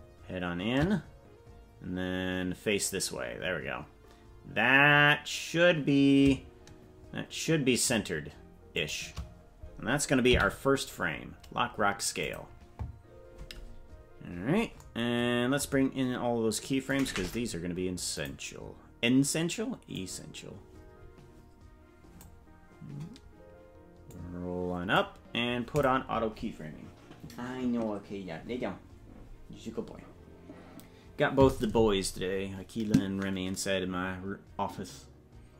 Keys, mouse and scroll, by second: 16.8 click, 20.4-22.4 drag, 22.4-23.6 scroll down 2, 24.0 click, 25.7 click.